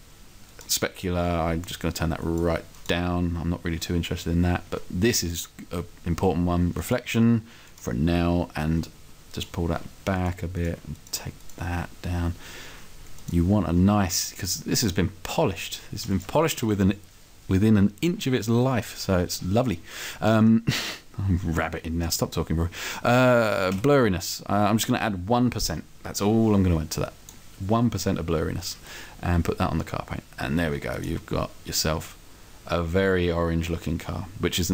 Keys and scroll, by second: 16.5 Up.